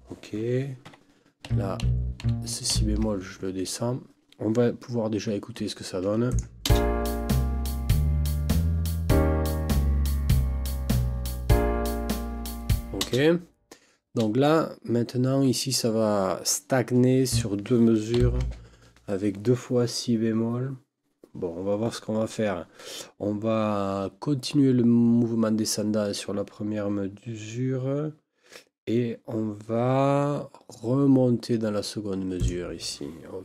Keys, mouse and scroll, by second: 0.8 Escape, 1.5 Right, 1.8 Left, 2.2 Right, 2.7 ctrl+Down, 5.2 Escape, 6.3 click, 6.7 space, 13.0 space, 17.3 click, 18.1 ctrl+Down, 32.4 click.